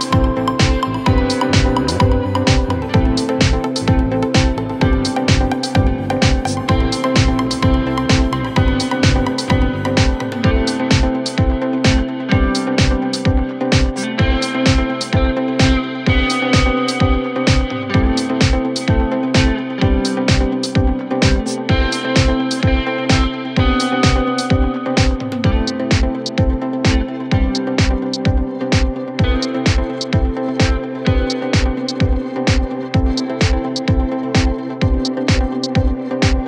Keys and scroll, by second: 4.8 shift+F2, 23.9 c, 34.8 shift+F2, 35.1 Escape.